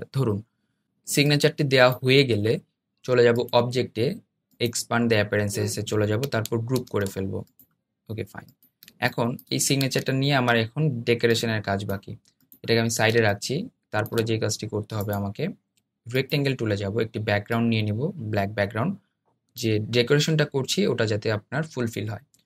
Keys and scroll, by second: 6.6 super+g.